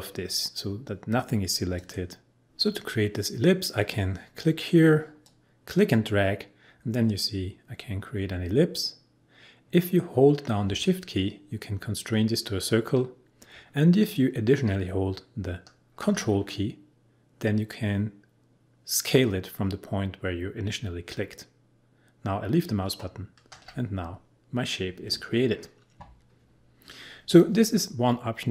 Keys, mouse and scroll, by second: 1.8 click, 5.2-15.2 drag.